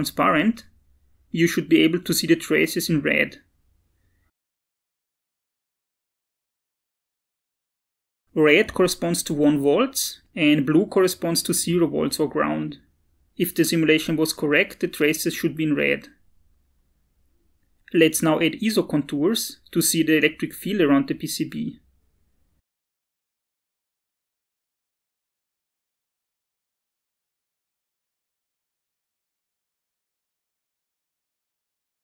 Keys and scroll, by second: 6.7-7.8 typing.